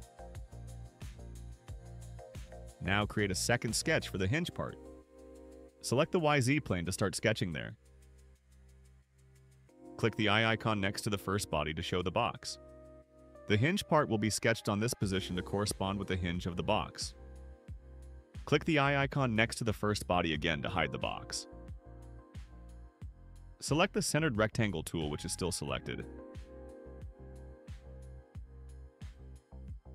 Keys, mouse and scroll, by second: 0.9-2.1 drag, 3.8 click, 6.7 click, 8.4 middle click, 8.7 middle click, 10.0 click, 13.0 middle click, 20.5 click, 22.0 right click, 27.4 click.